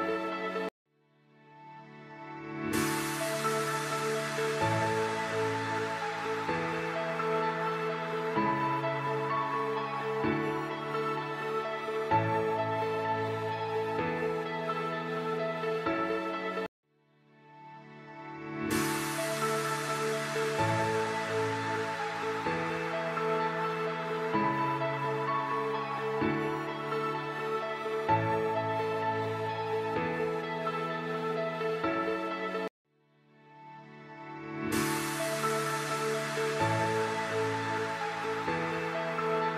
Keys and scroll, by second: 9.1 F3, 14.0 F2, 18.7 ctrl+r, 19.8 c, 22.5 ctrl+r, 23.0 Escape, 31.0 Escape, 33.0 ctrl+g, 33.7 c, 36.6 F4, 39.4 F2.